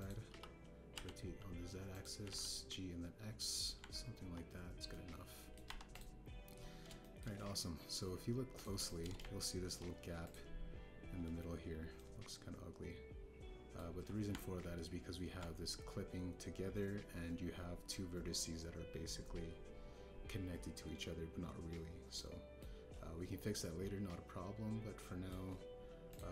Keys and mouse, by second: 1.2 r, 1.9 z, 2.9 click, 3.2 g, 3.2 x, 4.3 click, 4.7 Tab, 5.9 drag, 6.0-6.5 middle drag, 6.6 KP_1, 6.9 click, 8.0 shift+drag, 9.5 click, 9.8 shift+drag, 10.1-10.6 ctrl+drag, 11.2 click, 12.9-13.3 drag, 13.3-14.7 middle drag, 14.8 KP_1, 15.2 Tab, 23.2 middle click, 24.5-26.2 middle drag.